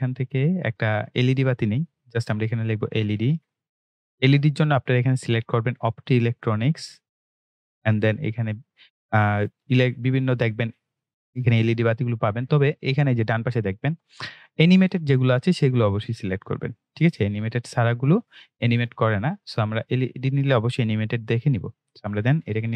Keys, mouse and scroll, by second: 2.8-3.8 typing, 6.8 click, 11.9 click, 15.1 click, 21.4 click.